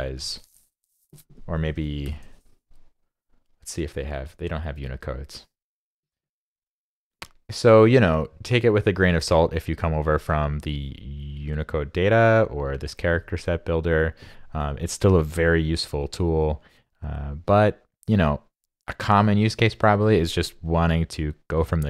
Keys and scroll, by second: 2.0 super+i.